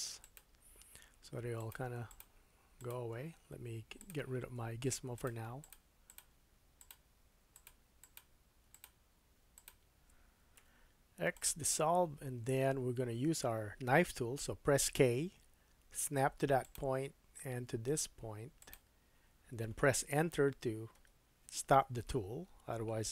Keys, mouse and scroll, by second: 1.5 click, 2.0 shift+click, 2.8 shift+click, 3.9-5.3 drag, 5.6 shift+click, 6.1 shift+click, 6.8 shift+click, 7.5 shift+click, 8.0 shift+click, 8.2 shift+middle click, 8.7 shift+click, 8.8 shift+middle click, 9.5 shift+click, 9.7-14.1 shift+middle drag, 10.5 x, 12.4 scroll up 1, 14.9 k.